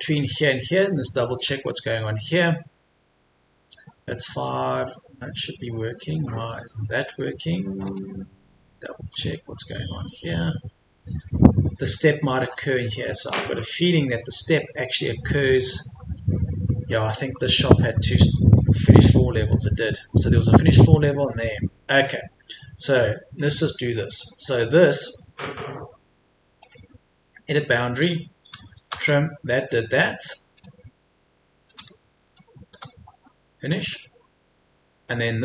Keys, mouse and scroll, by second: 0.4 click, 9.0 scroll down 1, 9.1 middle click, 9.8-10.2 scroll down 1, 10.2-11.0 scroll up 1, 12.8-13.8 scroll down 1, 13.8 click, 15.4-16.0 scroll down 1, 16.0-17.4 middle drag, 17.4 Escape, 17.8 scroll up 1, 18.0 Escape, 19.5 click, 20.1 scroll down 1, 21.0 Escape, 21.4-21.9 scroll down 1, 21.9-22.3 scroll up 1, 25.2-26.6 scroll up 1, 26.6 click, 28.8 t, 29.6 click, 31.0 Escape, 31.7 click, 32.7 Delete, 33.9 click.